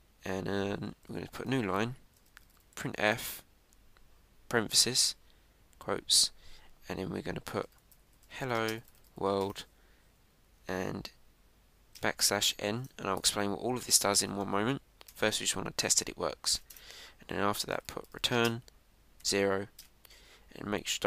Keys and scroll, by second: 2.3 Tab, 5.9 shift+", 10.3 shift+1, 14.1 ctrl+Right, 16.6 Right, 17.5 Return.